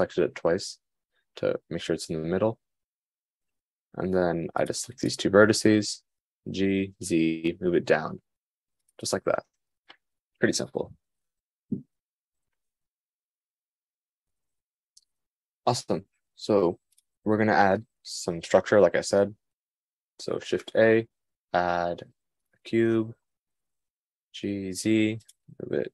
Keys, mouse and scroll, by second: 4.3-5.4 drag, 6.9 g, 10.1 Tab, 21.0 shift+a, 24.9 g.